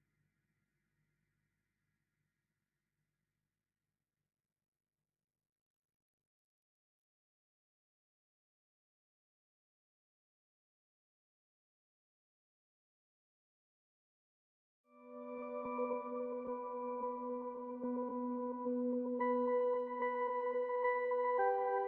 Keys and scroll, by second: 0.0-3.4 typing, 5.0-7.5 typing, 9.5 typing, 11.1 typing, 12.6-18.9 typing, 20.1-21.8 typing.